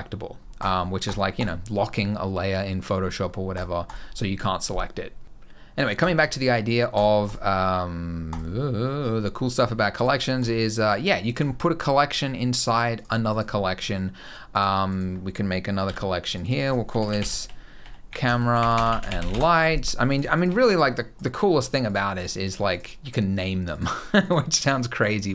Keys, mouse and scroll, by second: 0.3 click, 0.8 click, 1.1 click, 3.3 click, 3.6 click, 5.2 click, 5.7 click, 9.7 click, 10.1 click, 10.6 click, 12.7 click, 13.1 click, 14.3 click, 14.6 click, 15.6 c, 16.1 click, 16.2 click, 19.8 click, 20.1-22.8 shift+click, 20.4 click, 21.6 click, 21.9 click, 22.2 click, 22.4 click, 23.5 click, 24.0 click, 24.8 click.